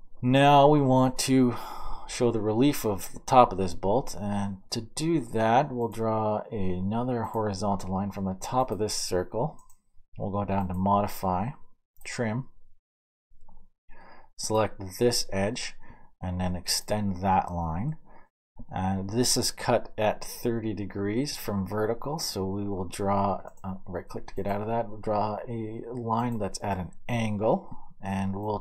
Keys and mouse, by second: 3.1-7.3 middle drag, 7.3-9.9 drag, 12.0-28.6 middle drag.